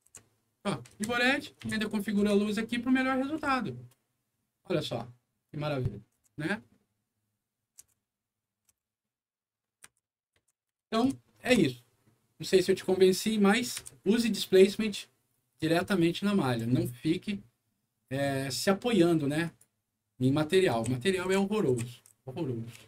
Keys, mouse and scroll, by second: 0.2 c, 0.8 1, 1.5 3, 2.1 2, 3.3 c, 5.4 right click, 9.8 1, 10.4 3, 10.7 2, 11.5 Escape, 13.0 middle click, 13.8 F11, 19.4 click, 20.2-22.7 right drag, 20.5-22.1 typing.